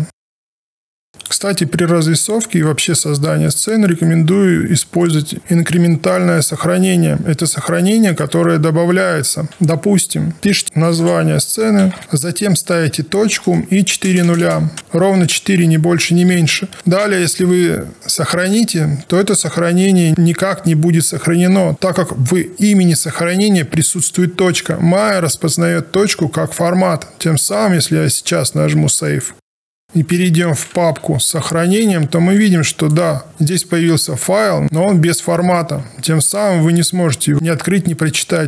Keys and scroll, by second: 9.5 ctrl+shift+s, 10.2-12.4 typing, 13.8 0, 30.8 super+Right.